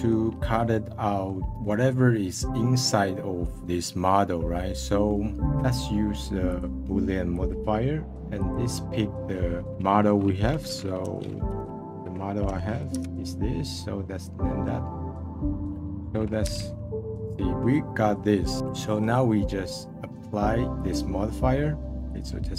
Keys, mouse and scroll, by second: 0.9-1.8 middle drag, 1.8-3.1 scroll down 1, 3.1-6.5 middle drag, 6.5-14.4 drag, 14.4 middle click, 16.5 /, 16.9-20.7 middle drag.